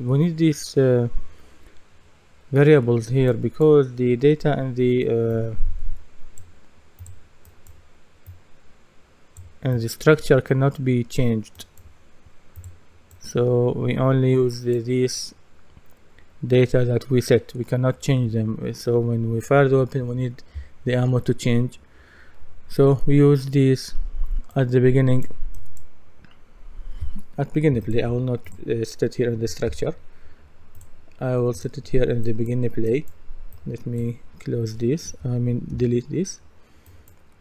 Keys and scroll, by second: 29.7 Delete, 35.7 Delete.